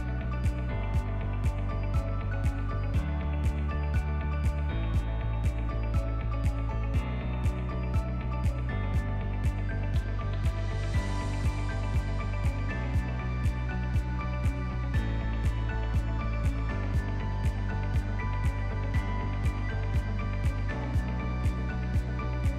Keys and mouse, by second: 0.0 Tab, 2.0 ctrl+click, 2.2 ctrl+middle click, 3.4 2, 4.0 alt+click, 4.9 shift+c, 5.5 ctrl+middle click, 6.0 shift+middle click, 6.5 ctrl+middle click, 6.8 shift+middle click, 7.3 ctrl+middle click, 7.7 shift+middle click, 8.5 ctrl+middle click, 9.1 shift+d, 10.1 p, 11.5 Tab, 11.9 click, 12.3 click, 12.7 click, 13.3 click, 14.0 h, 14.3 click, 14.9 s, 16.6-18.7 drag, 18.2-18.7 right drag, 18.7 s, 20.4 alt+h, 20.9 click.